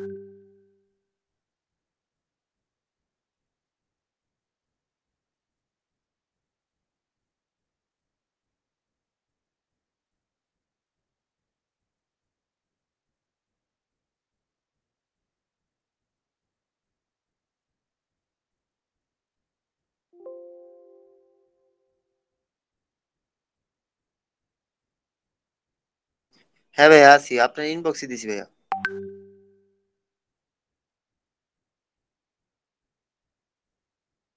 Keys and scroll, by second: 25.5 Delete, 28.0 ctrl+space, 30.1 ctrl+space.